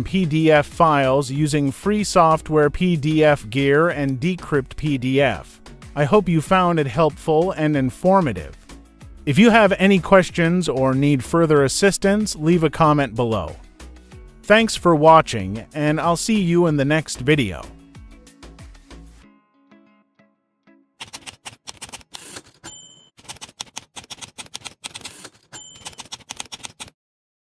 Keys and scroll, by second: 5.4 ctrl+c.